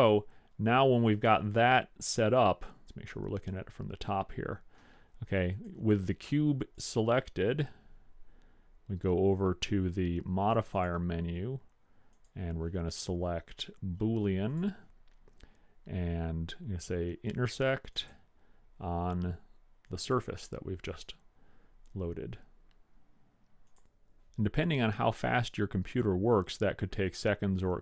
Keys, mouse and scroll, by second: 5.7-8.5 drag, 9.5-10.8 middle drag, 10.8-13.9 drag, 13.9 click, 18.1 click.